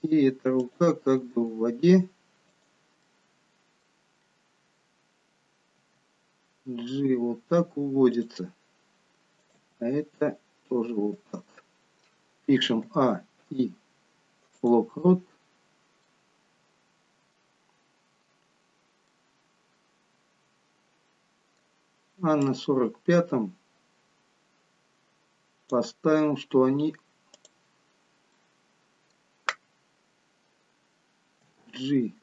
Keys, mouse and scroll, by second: 1.3 g, 3.0 middle click, 5.7 g, 9.3 click, 9.6 g, 13.4 a, 13.4 i, 16.1 middle click, 22.6 click, 27.3 click, 28.3 middle click, 31.4 g.